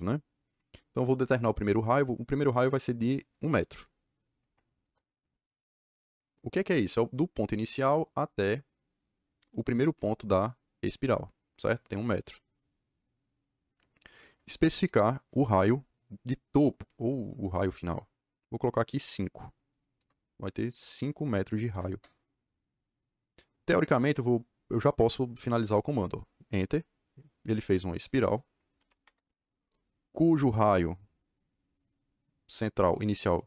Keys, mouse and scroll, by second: 4.3 KP_1, 4.7 KP_Enter, 19.9 KP_5, 21.8 KP_Enter, 26.1 KP_Enter, 28.7 d, 29.0 Return, 30.6 click.